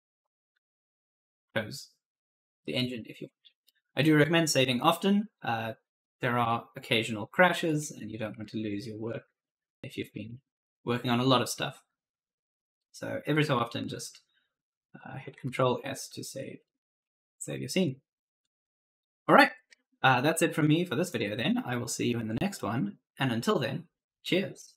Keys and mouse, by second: 3.5 right click, 6.1 right click, 7.6 right click, 7.8-9.8 typing, 15.3 ctrl+s, 16.6 right click, 16.9-18.2 typing, 18.9 right click, 20.9 click.